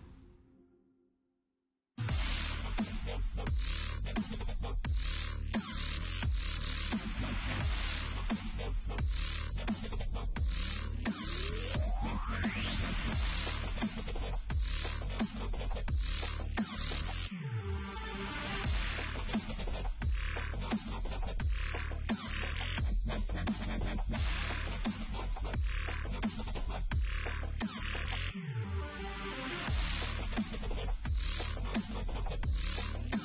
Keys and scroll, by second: 0.0 Down, 2.1 v, 4.1 ctrl+z, 5.9 ctrl+t, 6.2 Return, 7.1 Return, 7.2 e, 9.4 Return, 10.0 ctrl+t, 12.7 ctrl+shift+Return, 13.6 ctrl+t, 14.3 Return, 17.0 ctrl+t, 18.6 Return, 19.2 e, 20.4 v, 25.2 e, 27.2 v, 29.4 space, 32.0 ctrl+t, 32.5 Return.